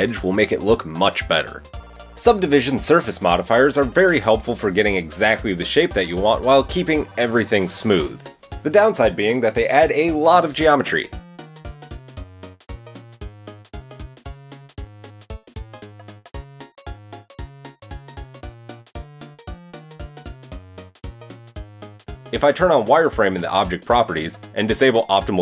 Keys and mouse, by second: 0.3 g, 1.0-2.4 middle drag, 4.9 middle click, 5.9 shift+middle click, 6.0-9.4 shift+middle drag, 7.0 g, 7.7 ctrl+r, 9.7 ctrl+r, 10.6 ctrl+r, 13.7 ctrl+r, 16.0-17.4 shift+middle drag, 16.5 Tab, 17.2 KP_1, 17.3 Tab, 18.6 ctrl+r, 20.6 Tab, 20.9 middle drag, 21.2 shift+click, 22.0-23.2 middle drag, 23.2-24.3 drag, 24.3-25.4 shift+middle drag.